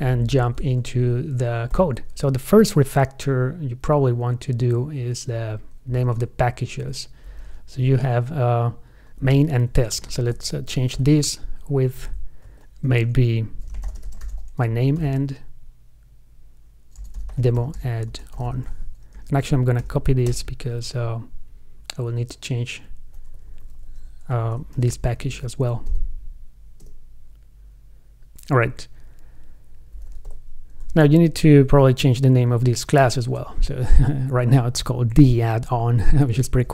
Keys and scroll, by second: 10.4 alt+super+r, 19.4 super+a, 20.0 super+c, 25.1 alt+super+r, 25.5 super+v, 33.2 alt+super+r.